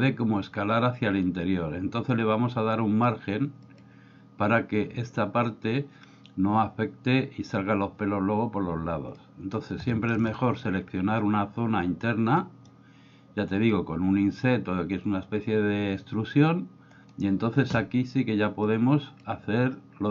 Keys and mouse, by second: 3.6 click, 9.2 middle click, 9.9 shift+middle click, 12.4 middle click, 18.7 click.